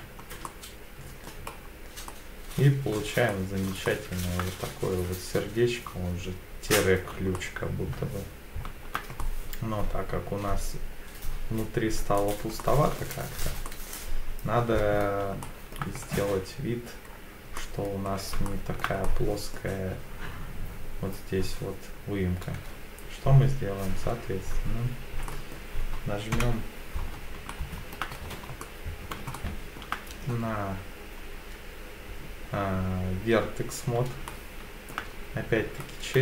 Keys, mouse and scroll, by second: 0.4 middle click, 1.5-2.6 scroll down 3, 2.1 middle click, 2.9-3.3 scroll up 2, 3.3 middle click, 3.9 shift+middle click, 7.3-8.9 shift+middle drag, 9.2-12.1 middle drag, 12.6 shift+middle click, 13.7-15.0 middle drag, 15.4 shift+middle click, 16.0-16.5 scroll up 2, 16.5 scroll down 2, 17.1 scroll up 2, 17.6 middle click, 18.1-18.5 scroll down 2, 18.5 shift+middle click, 19.0 middle click, 24.0 1, 24.7 scroll down 1, 25.3 middle click, 25.3 scroll down 2, 26.3 KP_7, 27.5 shift+middle click, 28.1-28.5 scroll up 2, 28.6 middle click, 29.3 shift+middle click, 34.3 shift+middle click, 35.8-36.2 scroll up 3.